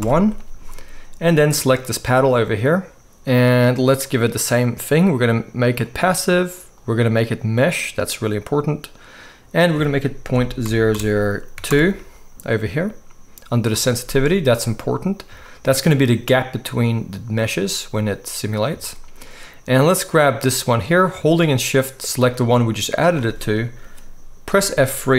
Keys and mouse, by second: 1.9-4.0 middle drag, 4.0-20.0 drag, 10.9 0, 20.0-22.1 middle drag, 22.1 shift+click, 22.3-25.1 shift+middle drag, 24.5 F3.